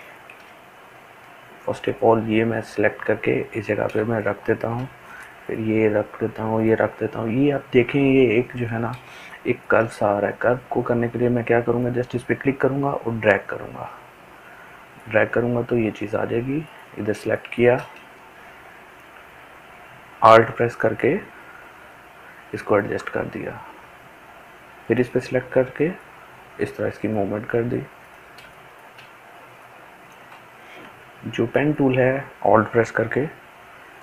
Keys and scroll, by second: 4.0 ctrl+space.